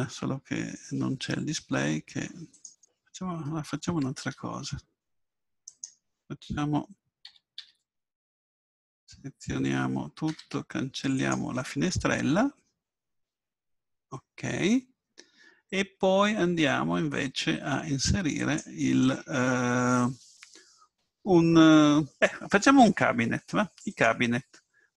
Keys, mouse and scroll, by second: 2.5-4.2 drag, 4.2 Escape, 5.7 right click, 7.3 a, 7.7 a, 10.5 x, 13.7-18.4 middle drag, 18.4-24.9 drag.